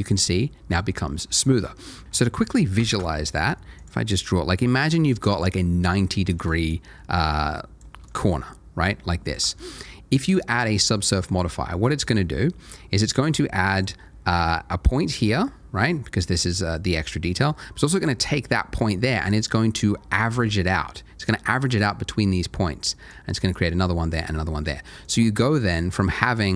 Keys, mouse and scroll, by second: 1.4 shift+middle click, 1.7 shift+scroll down 1, 3.2 ctrl+shift+a, 3.8 click, 7.6 ctrl+shift+a, 8.1 click, 9.0 ctrl+shift+a, 13.7 click, 18.8 ctrl+shift+a, 19.5 click, 24.9 ctrl+shift+a, 25.9 ctrl+shift+a, 26.1 shift+click.